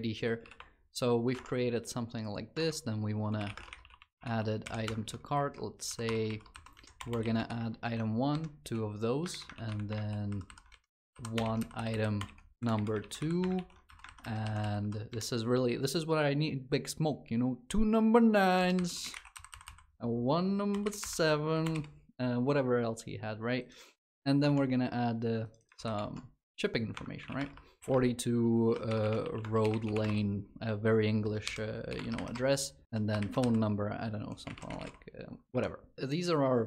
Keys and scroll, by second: 25.5 ctrl+c.